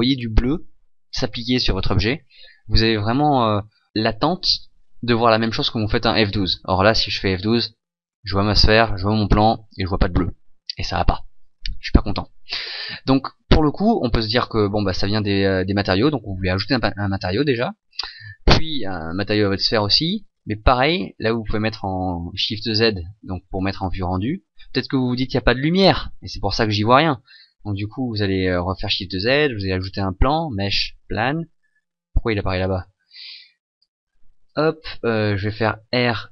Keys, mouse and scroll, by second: 11.2 Escape, 14.1 click, 14.9 click, 18.5 right click, 19.6 click, 22.4 shift+z, 27.3 Escape, 28.6 shift+z, 29.7 shift+a, 33.8 click, 35.6 r.